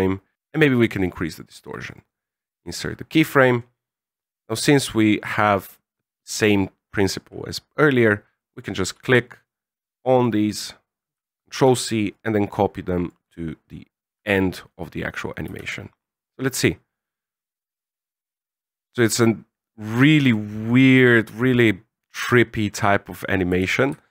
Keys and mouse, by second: 1.9 right click, 4.7 click, 6.1 middle click, 8.3 right click, 8.8 c, 11.5 ctrl+c, 12.1 click, 14.1 ctrl+v, 15.5 alt+a, 23.6 alt+a.